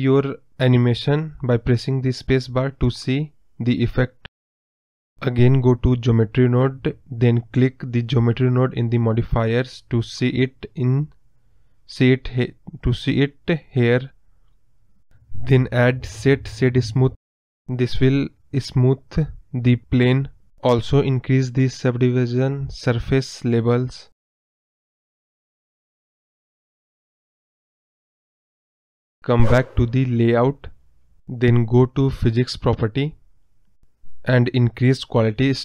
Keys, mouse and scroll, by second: 0.3 space, 3.6-4.1 scroll up 4, 4.1 middle click, 4.5 scroll down 3, 5.2 scroll up 2, 7.4 space, 8.4-9.7 drag, 9.7 scroll up 1, 9.8-13.3 middle drag, 13.3-17.8 drag, 18.7 scroll up 4, 19.0-21.6 middle drag, 21.6-22.9 drag, 22.9-23.6 scroll down 4, 23.0 middle click, 23.6 middle click, 23.8 scroll up 7, 24.0 middle click, 24.7 scroll down 3, 29.3 click, 29.6 scroll down 3, 30.2 KP_Decimal, 30.4 scroll up 2, 30.5-35.6 middle drag.